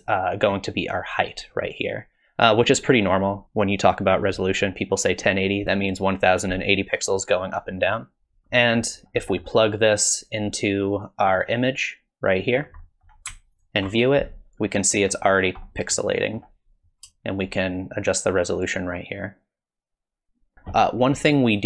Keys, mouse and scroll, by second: 8.4 middle click, 8.4 scroll down 6, 8.6 middle click, 9.0-9.9 scroll up 2, 9.2 middle click, 9.9 click, 11.0 click, 11.5 click, 12.8 middle click, 13.6 ctrl+shift+click, 14.9 middle click, 15.4-15.8 scroll up 4, 15.6 middle click, 17.4 shift+click, 21.0 middle click.